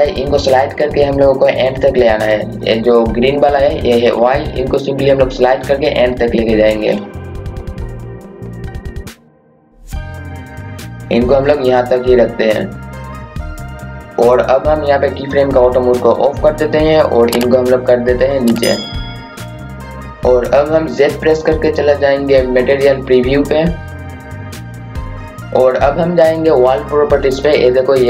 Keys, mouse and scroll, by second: 7.0-13.2 drag, 13.2-13.6 scroll up 1, 14.1 scroll down 1, 16.6 click, 19.5 click, 24.1 typing, 24.5 click.